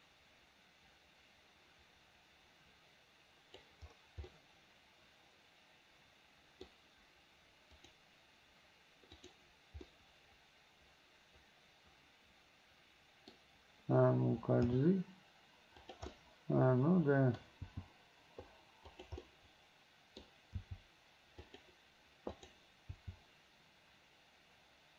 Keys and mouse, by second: 4.4-6.8 middle drag, 7.9 click, 9.2 click, 10.0-13.5 middle drag, 14.8 g, 16.2-17.5 drag, 17.8 g, 19.4-20.5 drag, 21.6 g, 22.5 click, 23.0 g.